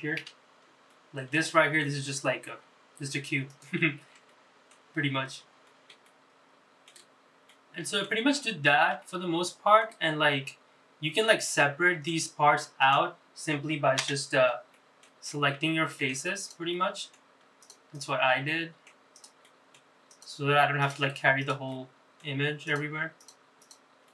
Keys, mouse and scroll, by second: 1.2 middle click, 1.7 shift+middle click, 2.8 g, 5.8 middle click, 6.1 shift+middle click, 7.5 middle click, 8.3-8.9 scroll up 5, 9.0 shift+middle click, 10.1 scroll up 2, 10.8-11.2 scroll down 3, 11.5 middle click, 12.8 click, 14.1 KP_Divide, 14.8 middle click, 15.2 scroll up 2, 16.0 Tab, 16.4 click, 16.7 middle click, 17.6 shift+click, 18.0 shift+click, 18.5 middle click, 19.2 shift+click, 19.4 middle click, 20.1 shift+click, 20.8 shift+click, 21.4 shift+click, 21.9 middle click, 22.7 shift+click, 23.2 shift+click, 23.6 shift+click.